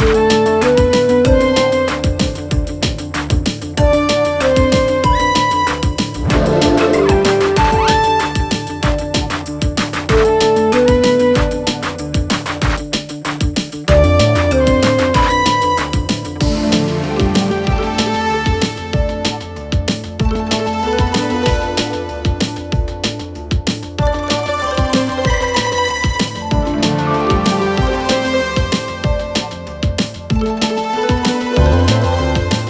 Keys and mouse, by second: 1.4 middle click, 3.4 2, 3.7 click, 5.0 ctrl+r, 6.3 ctrl+b, 13.2 1, 14.4 middle click, 15.3 shift+middle click, 16.7 shift+s, 18.1 shift+middle click, 18.8 middle click, 20.0 shift+middle click, 22.5 Tab, 23.2 click, 23.7-24.0 shift+drag, 24.2 shift+a, 28.5 r, 31.6 s.